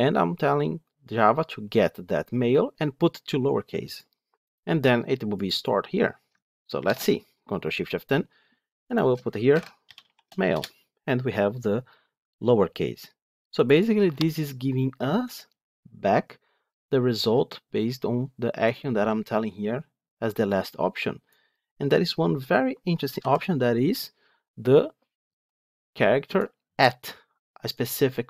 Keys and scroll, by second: 6.7 ctrl+shift+F10.